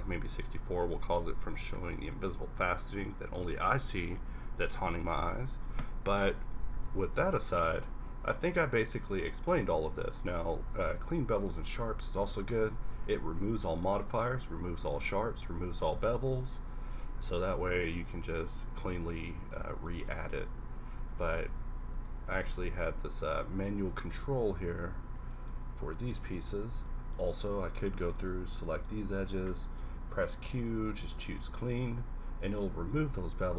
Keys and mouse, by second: 0.4 Tab, 5.1-6.8 middle drag, 6.8 q, 9.9 q, 13.6 Tab, 13.9 a, 15.7 Tab, 16.4 q, 19.6 Tab, 21.1 Tab, 21.3 ctrl+z, 21.5 ctrl+z, 22.1 ctrl+z, 22.5 ctrl+z, 22.8 Tab, 23.4 Tab, 25.0 Tab, 25.5 a, 26.1 a, 26.4 a, 26.8 Tab, 27.3 Tab, 29.9 q.